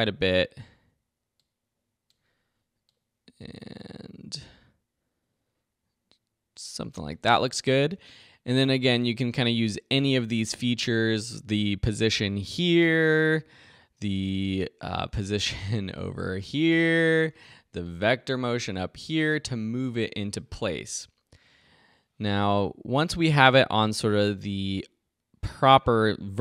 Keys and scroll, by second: 17.1 super+z, 19.1 super+z.